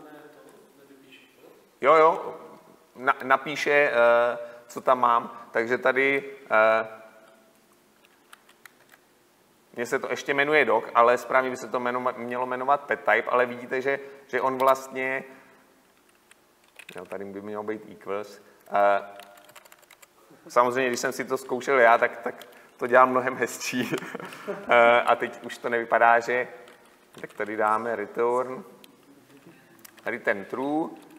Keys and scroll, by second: 2.1 Tab, 9.0 Tab, 22.5 Return, 23.5 Return, 23.6 Delete, 30.1 Tab.